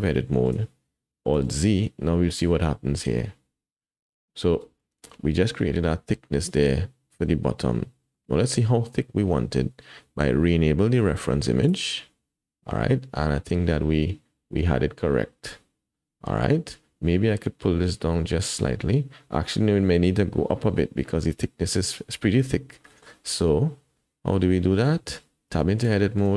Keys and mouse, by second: 0.3 shift+middle click, 1.4 alt+z, 4.8 shift+click, 8.1 shift+click, 11.6 click, 22.9 shift+click, 24.3-24.8 drag, 25.5 Tab, 26.0 click.